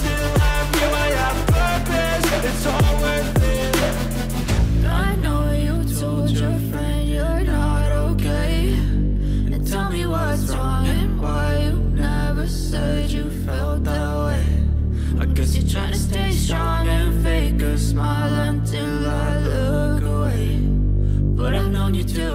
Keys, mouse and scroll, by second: 3.9 click, 7.0 shift+s, 8.3-9.1 typing, 10.1-11.0 typing, 12.0 Return, 13.1-14.7 typing, 16.1-22.3 drag.